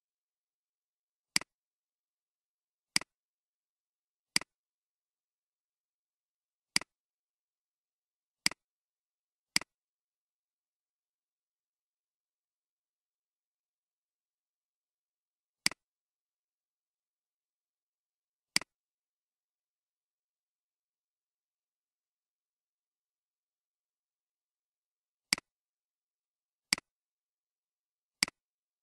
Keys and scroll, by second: 2.0 Delete.